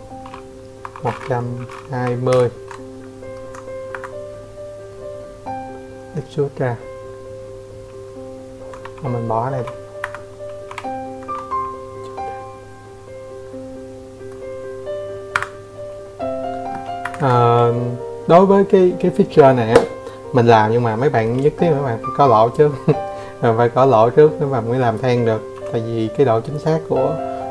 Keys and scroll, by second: 0.8 Escape, 1.4 Escape, 6.8 typing, 7.5 Escape, 8.2 e, 12.8 Escape, 14.6 Escape, 14.7 Escape, 23.1 c, 25.3 Escape, 25.5 Escape, 26.6 Escape.